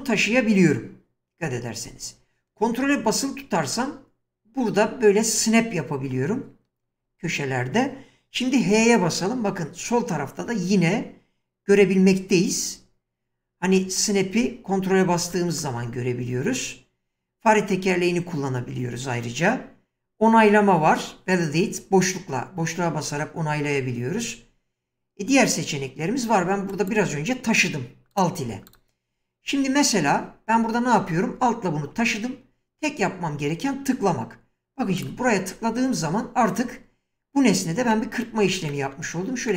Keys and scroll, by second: 8.6 h, 11.7 <.